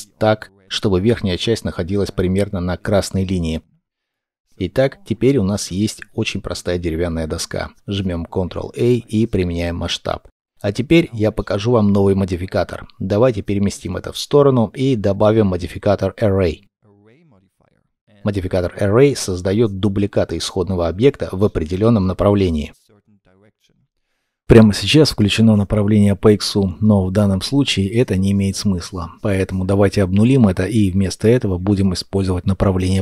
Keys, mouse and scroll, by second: 1.2 shift+middle click, 2.9-3.8 scroll, 3.8 middle click, 4.1-4.5 scroll down 1, 4.5 shift+middle click, 5.1 middle click, 8.0 ctrl+a, 10.2 scroll down 1, 10.5 middle click, 14.4 middle click, 20.3 double click, 29.3 KP_0, 29.8 Return, 32.5 KP_1, 32.8 Return.